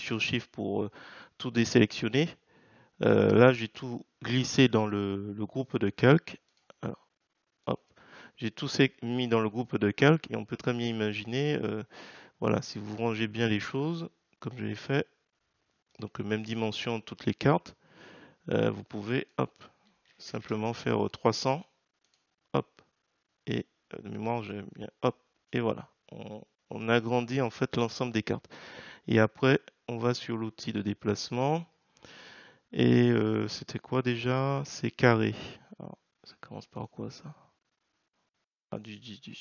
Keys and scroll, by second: 20.0 3.